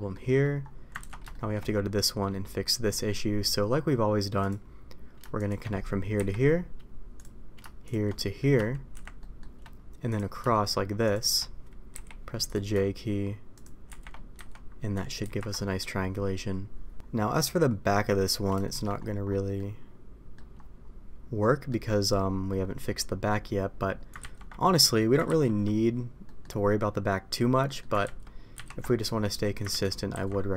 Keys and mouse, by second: 1.0 ctrl+z, 1.2 shift+middle click, 2.9 middle click, 8.1 middle click, 8.9 shift+r, 9.1 shift+middle click, 11.9 j, 13.8 shift+r, 14.3 a, 15.2 ctrl+t, 15.6 middle click, 17.3-18.4 middle drag, 18.6 shift+middle click, 19.5 middle click, 21.3 middle click, 24.2 ctrl+z, 26.2 middle click, 27.6 middle click, 28.8 middle click.